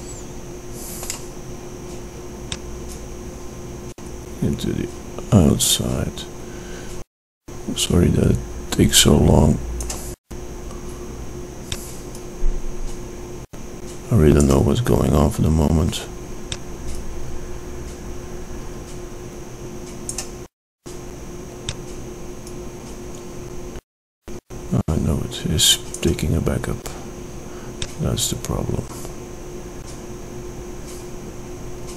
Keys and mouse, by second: 1.9-3.9 middle drag, 5.3 click, 12.6-14.4 drag, 17.4-18.9 drag, 23.1-24.4 drag, 28.7-30.7 drag.